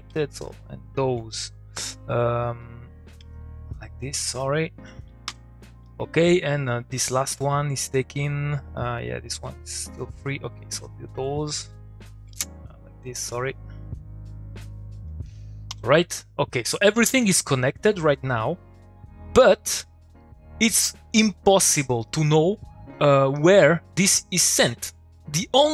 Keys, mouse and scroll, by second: 2.6 click, 3.4-4.0 shift+click, 5.2 u, 5.8 click, 7.8-10.1 drag, 15.7 u, 16.1 click, 17.6 middle click, 18.1 click, 19.6 middle click, 22.0 middle click, 22.1 click, 22.3 middle click, 23.4 click, 25.1 click.